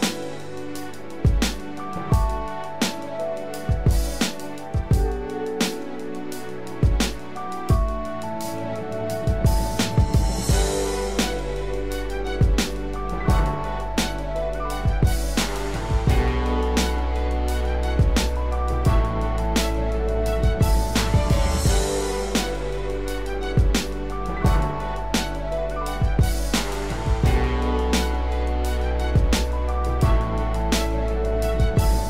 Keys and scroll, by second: 8.2 ctrl+-, 30.3 ctrl+0, 31.4 ctrl+=.